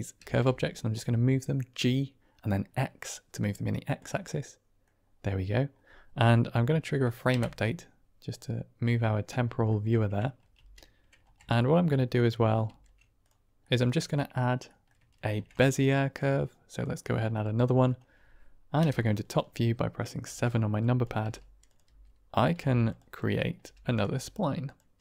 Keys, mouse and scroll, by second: 0.1 g, 0.2 x, 3.8 click, 4.4 middle click, 7.3 Right, 9.2-9.6 middle drag, 10.5 ctrl+space, 11.5 shift+drag, 11.5 shift+middle drag, 12.6 shift+s, 13.6-14.0 middle drag, 14.6 middle drag, 15.1 shift+a, 17.2-17.8 drag, 18.7 KP_7, 20.1 Tab, 20.9 click, 21.1 g, 21.6 click, 21.7 s, 22.2 click, 22.4 r, 22.8 click, 23.1 click, 23.5 r, 23.7 click, 24.0 s, 24.5 click.